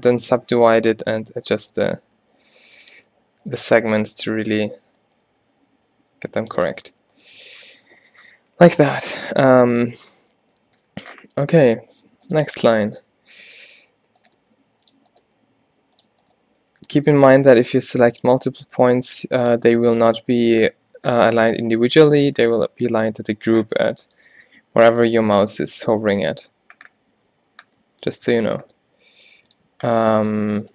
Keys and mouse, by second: 1.3 alt+w, 2.1 g, 4.6 alt+w, 5.2 g, 6.8 Tab, 7.6 Tab, 8.3 a, 8.5 a, 12.4 middle click, 13.1 g, 13.3 middle click, 14.5 g, 15.3 g, 16.7 g, 18.6 g, 20.1 middle click, 20.3 middle click, 23.3 middle click, 24.5 z, 25.3 a, 25.5 a, 26.8 middle click, 27.5 z, 28.7 g.